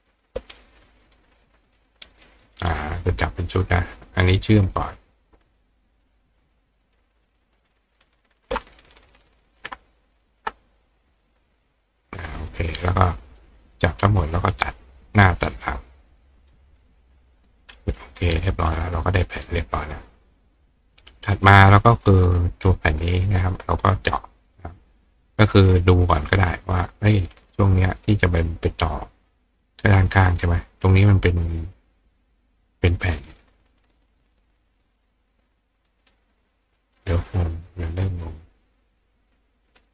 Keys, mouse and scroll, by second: 0.1 click, 1.1 click, 1.8 click, 2.5 click, 3.6 click, 5.0 click, 6.0 shift+click, 7.9 shift+click, 10.1 shift+click, 11.3 click, 12.4 click, 13.7 click, 15.7 click, 16.4 click, 17.1-17.5 scroll up 1, 17.7-18.7 scroll down 1, 18.7-19.1 scroll down 1, 21.2 click, 22.3 click, 23.0 click, 24.5 click, 25.0 click, 27.1 click, 27.5 right click, 30.3 click, 35.9 right click, 37.0 right click, 39.4 click.